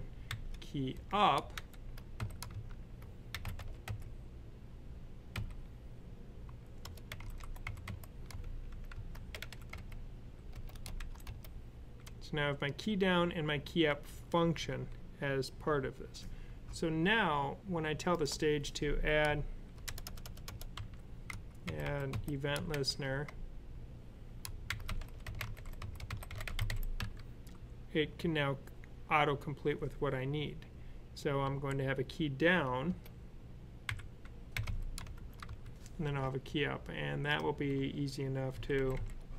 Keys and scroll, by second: 0.0-3.7 typing, 5.2 typing, 6.7-9.5 typing, 10.8 shift+[, 20.6-22.6 typing, 24.5-26.8 typing, 31.3 Down, 34.4-35.3 typing, 38.4 super+c, 38.6 super+v, 38.8 super+v.